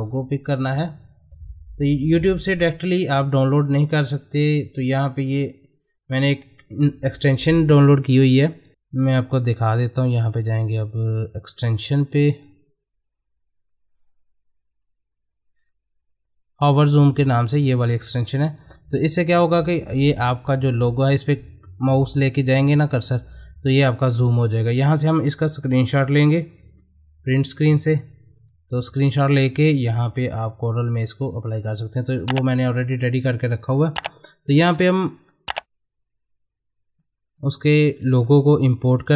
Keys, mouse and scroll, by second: 9.9 click, 15.6-16.2 scroll down 1, 17.7-19.0 drag, 30.3 click, 34.2 click, 35.0-36.7 middle drag, 37.6 click.